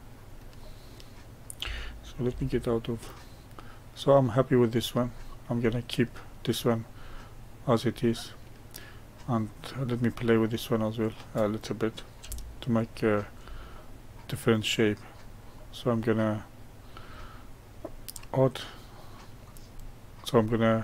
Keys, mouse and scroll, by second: 2.2 Tab, 2.8-5.0 middle drag, 5.0-5.6 scroll down 2, 5.6-7.3 middle drag, 7.3-7.9 scroll up 1, 7.9-9.7 middle drag, 9.7 click, 10.7-18.5 middle drag, 18.9-19.7 middle drag, 19.7-20.4 scroll up 1, 20.4-20.8 middle drag.